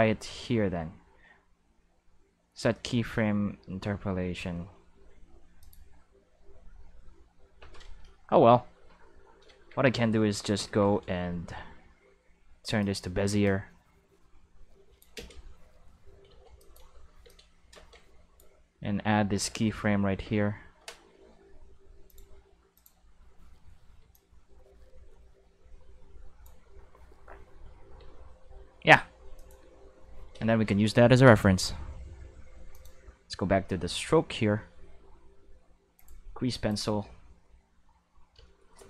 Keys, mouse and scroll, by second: 5.6 click, 9.4 a, 10.6 t, 12.7 click, 13.4-14.9 drag, 15.1 space, 16.2 space, 16.5 click, 16.9 space, 17.2 space, 17.2-18.3 drag, 20.2 i, 22.0 click, 22.7 click, 22.9 space, 23.9 space, 24.1-26.4 drag, 26.6 space, 27.9 space, 29.3 click, 29.5 space, 30.1 space, 30.4 q, 32.7 click, 35.9 click, 36.6-38.4 drag.